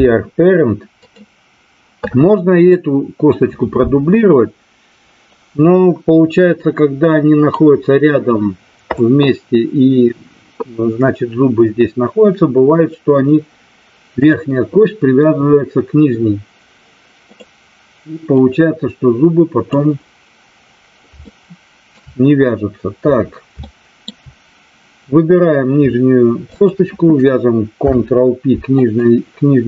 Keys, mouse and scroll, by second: 5.3-7.5 drag, 14.1 click, 17.2 click, 18.3-19.7 drag, 21.2 shift+middle click, 23.6 shift+middle click, 26.5 shift+click, 27.7 ctrl+p.